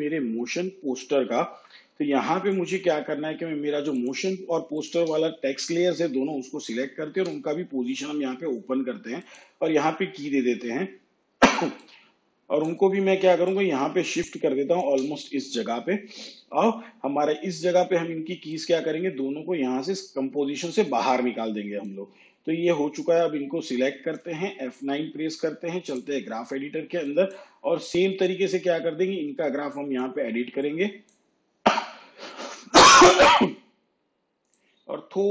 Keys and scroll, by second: 7.3 p, 24.8 F9.